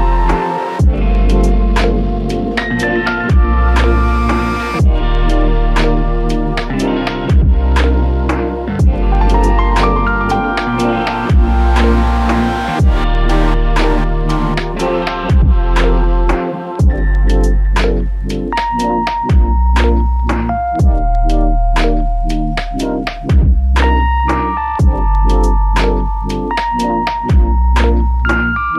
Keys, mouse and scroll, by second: 13.6 ctrl+i, 16.3 f, 18.2 double click, 26.5 click, 26.9 alt+m, 28.2 alt+click.